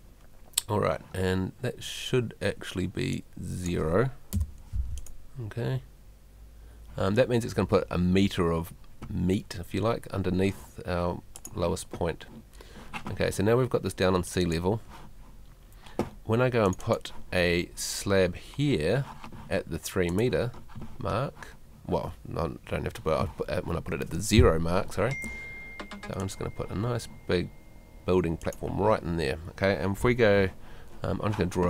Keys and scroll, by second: 4.3 0.